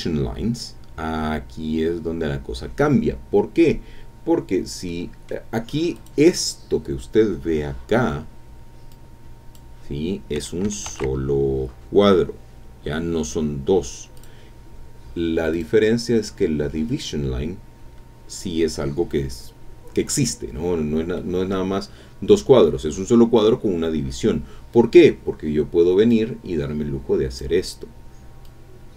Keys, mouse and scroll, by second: 4.9 click, 4.9 scroll down 1, 5.9 click, 8.9 click, 10.9 ctrl+z, 14.2 click, 15.5 click, 20.2-20.9 scroll up 1, 21.2 middle click, 26.1-27.6 drag, 28.4-28.9 drag.